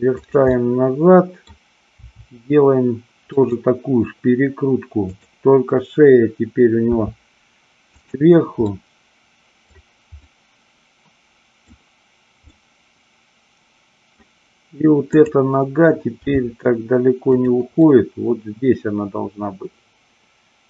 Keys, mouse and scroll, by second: 0.5-1.4 middle drag, 3.4 click, 6.9 r, 8.0 click, 8.7-9.7 middle drag, 10.1-11.6 middle drag, 12.5-14.1 middle drag, 15.1 click, 16.3 g, 17.4 click, 17.7-20.6 middle drag.